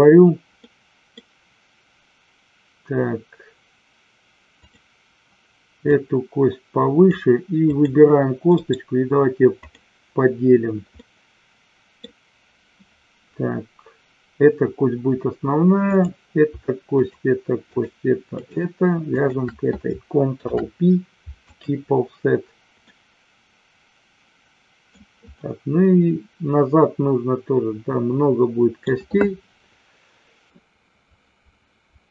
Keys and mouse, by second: 0.6 middle click, 5.8-7.0 drag, 7.7 click, 8.5-9.8 right drag, 11.0 middle click, 17.0 shift+click, 17.6 shift+click, 18.4 shift+click, 19.1 shift+click, 20.4 ctrl+p, 22.8-25.0 middle drag, 25.4-28.8 middle drag.